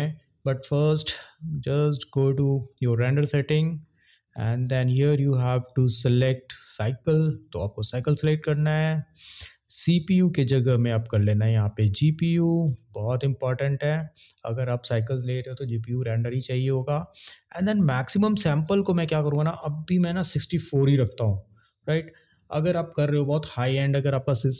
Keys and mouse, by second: 2.9 click, 5.6-8.3 drag, 10.1 click, 18.7-21.6 drag.